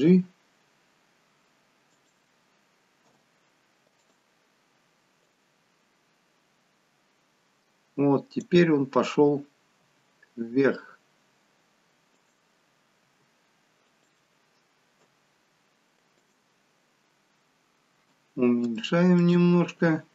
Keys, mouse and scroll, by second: 0.0 g, 3.0 i, 5.2 click, 9.7 g, 12.9 g, 14.9 i, 17.4 scroll down 3, 18.8 shift+middle click, 19.4 scroll up 3.